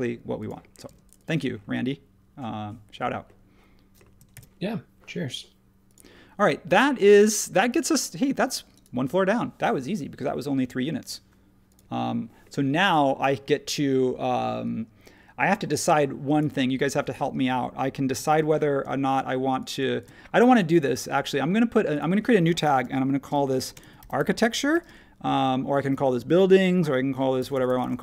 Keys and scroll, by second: 0.8 space, 4.3 super+s, 23.5 shift+s, 24.7 typing, 27.4-28.0 typing.